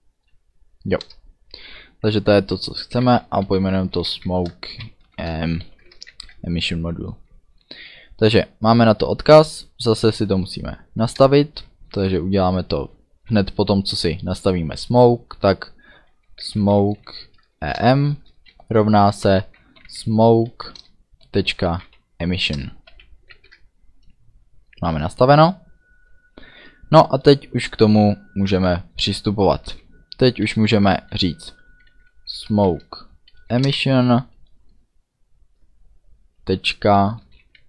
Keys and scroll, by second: 1.0 Return, 2.3-5.6 typing, 6.1 ctrl+s, 11.1 Return, 16.1-22.9 typing, 17.6 Down, 17.8 Return, 20.6 Up, 20.8 Return, 22.5 Return, 23.3 ctrl+s, 32.0-33.2 typing, 33.5 Down, 33.6 Return, 37.3-37.6 typing.